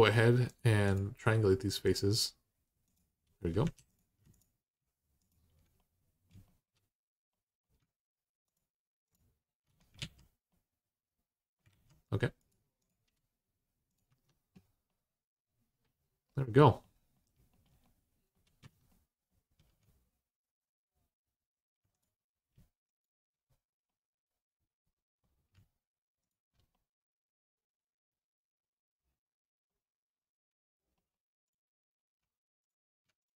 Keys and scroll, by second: 3.4 2, 9.8 alt+z, 11.5 alt+z, 13.9 Tab, 18.4 Tab.